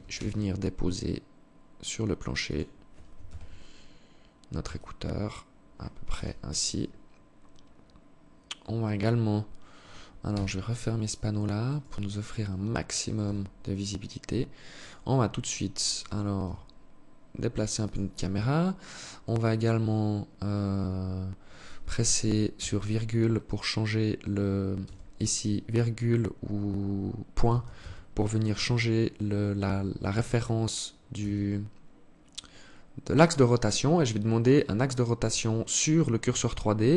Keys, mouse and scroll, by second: 2.5 KP_1, 3.9 Tab, 4.5 scroll down 2, 5.4 KP_0, 6.2-6.6 scroll down 2, 6.7 scroll up 1, 8.6 scroll down 1, 9.5 n, 10.9 right click, 12.5 g, 15.7 g, 21.8 ., 24.1 ,, 26.7 ., 27.1 ,, 27.7 ., 28.9 ., 29.4 ,, 30.5 ..